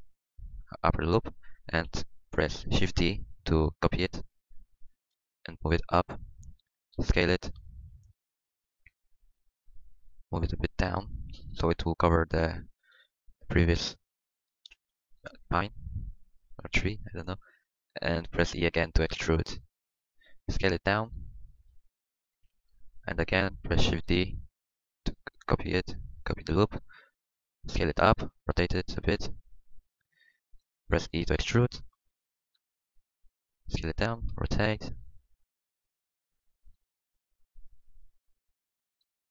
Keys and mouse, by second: 1.4-3.1 middle drag, 1.8 KP_1, 3.1-4.2 drag, 5.0 shift+d, 7.0 s, 10.3 g, 12.6 middle click, 18.8 e, 20.4 s, 22.2 s, 23.9 shift+d, 26.7 s, 28.0-29.1 drag, 28.5 r, 30.1 g, 31.4 e, 32.5 s, 34.3 r, 34.9 r, 35.8 click, 38.0-39.3 drag, 38.0 r.